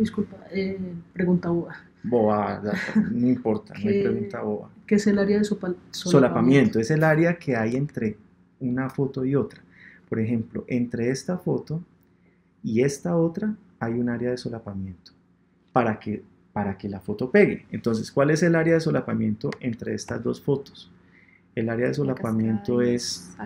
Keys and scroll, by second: 7.7 super+Tab.